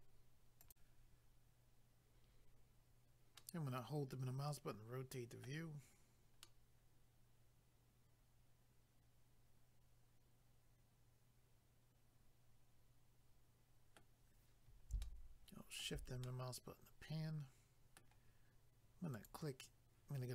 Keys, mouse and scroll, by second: 0.6 click, 3.4 middle click, 6.0 scroll down 1, 6.4 middle click, 15.1 shift+middle click, 16.2 scroll down 1, 16.3 middle click, 19.1 click.